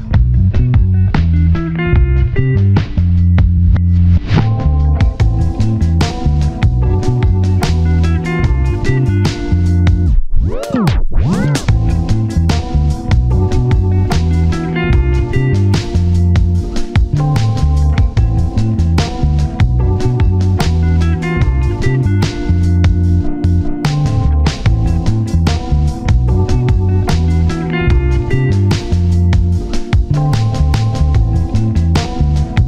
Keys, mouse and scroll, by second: 2.7 scroll down 1, 2.9 typing, 3.8-4.7 scroll up 1, 4.7 scroll down 1, 4.8-6.1 typing, 5.1 shift+middle click, 5.9-6.6 scroll up 2, 7.4-8.2 scroll up 1, 8.3 shift+middle click, 9.4 shift+click, 10.9 double click, 12.2 scroll up 1, 12.4 scroll down 1, 12.8 shift+click, 13.3 shift+click, 13.9 shift+click, 14.3 ctrl+z, 14.6 shift+click, 14.9 shift+click, 15.6 shift+click, 16.4 ctrl+z, 16.6 shift+click, 18.1 shift+scroll up 1, 19.9 ctrl+shift+scroll down 1, 20.1 shift+middle click, 20.3-20.7 shift+scroll up 2, 21.1 ctrl+shift+z, 21.6 ctrl+shift+click, 21.6 ctrl+shift+z, 21.9 shift+click, 24.3 ctrl+shift+z, 24.5 shift+click, 24.9 shift+click, 25.4-25.9 scroll down 1, 26.2 scroll up 1, 26.5 shift+middle click, 28.9 scroll down 1, 29.1-29.5 ctrl+z, 29.7-30.2 scroll up 2, 29.9 shift+click, 30.2 scroll down 1, 30.5 shift+click, 30.8 shift+click, 32.1 ctrl+shift+z, 32.5 shift+click.